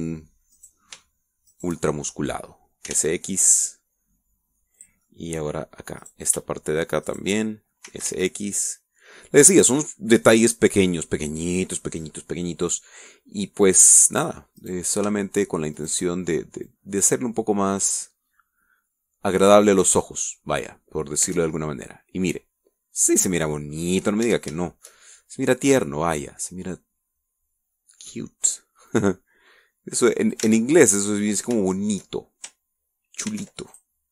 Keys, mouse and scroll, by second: 0.2 middle click, 1.4 right click, 2.4 shift+right click, 2.8 shift+middle click, 3.8 s, 3.9 x, 5.6 click, 5.9 middle click, 6.9 right click, 8.0 shift+right click, 8.8 s, 9.0 x, 10.5 click, 11.6-12.0 scroll down 1, 12.0 middle click, 13.3 scroll down 2, 13.6-14.8 middle drag, 14.9 scroll up 2, 15.5 right click, 16.7 shift+right click, 17.6-19.0 drag, 19.0-19.5 scroll up 1, 19.8-20.1 scroll up 1, 21.2 scroll down 1, 21.6 click, 22.2 Tab, 22.5 scroll down 1, 22.8 click, 23.4-24.8 middle drag, 24.9 scroll up 1, 25.2 Tab, 25.5 shift+middle click, 26.6 right click, 27.0-29.2 middle drag, 29.8-31.4 drag, 31.4 ctrl+z, 31.6 ctrl+middle click, 32.2 scroll up 1, 32.6 shift+middle click.